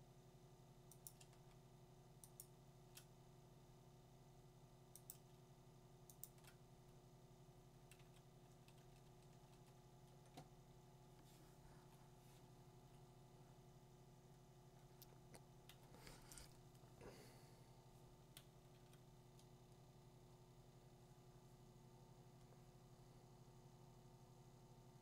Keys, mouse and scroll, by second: 1.1 click, 2.4 click, 6.2 click, 7.9-9.3 typing, 11.8 Delete, 15.7 b, 19.6 click, 21.7-24.0 drag.